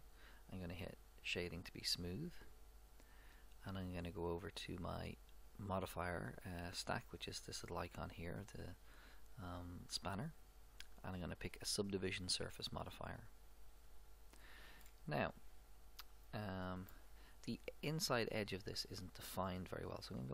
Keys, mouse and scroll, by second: 1.0-2.9 drag, 4.1-8.1 drag, 10.4-12.5 drag, 13.8-15.6 drag, 14.8-19.0 middle drag.